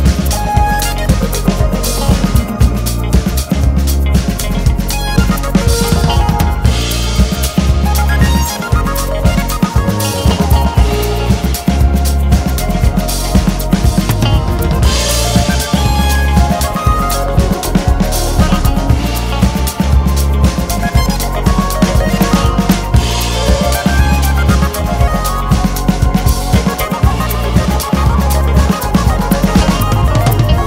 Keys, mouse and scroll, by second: 0.0 alt+s, 2.0 click, 3.0 alt+s, 7.0 click, 7.2 alt+s, 9.4 click, 9.6 alt+s, 10.8 click, 11.2 alt+shift+s, 11.9 alt+s, 13.8 click, 14.0 `, 15.2 alt+a, 15.5 2, 15.8 alt+click, 15.9 `, 17.1 alt+a, 17.3 `, 19.9 `, 20.6 scroll up 1, 21.4 1, 21.6 click, 21.7 `, 23.0 scroll down 1, 23.2 KP_1, 24.6-25.0 scroll down 1, 25.0 s, 30.0 `.